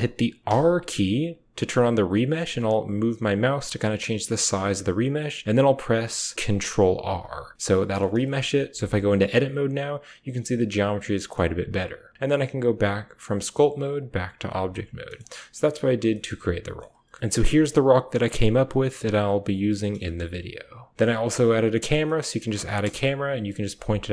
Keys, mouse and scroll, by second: 0.3 r, 5.8 r, 6.9 ctrl+r, 7.5 middle click, 8.0 shift+middle click, 8.6 Tab, 9.0 middle click, 10.0 middle click, 10.4 middle click, 10.6 middle click, 10.8 middle click, 11.2 Tab, 12.2-13.4 drag, 14.5-15.0 middle drag, 15.3 middle drag, 15.5 drag, 15.9 shift+drag, 16.3-16.7 drag, 17.2 alt+h, 17.2 drag, 17.2 a, 17.6-19.4 middle drag, 19.4 drag, 19.5 middle drag, 19.7 drag, 20.2-20.9 drag, 21.1 g, 21.9 click, 22.7 KP_0.